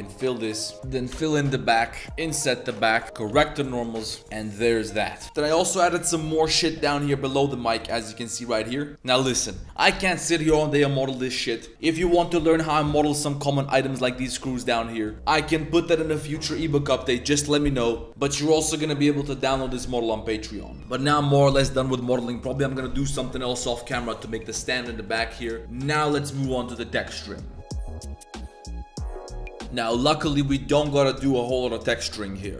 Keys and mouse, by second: 0.7 z, 1.1 f, 2.2 i, 2.9 z, 3.0 Tab, 3.0 a, 3.3 shift+n, 3.7 Tab, 4.2 Tab, 4.2-4.6 drag, 5.0 Tab, 7.6 drag, 11.8 shift+click, 13.8 z, 14.4 z, 14.6 z, 14.7 drag, 15.1 z, 18.4 drag, 19.1 drag, 21.0 click.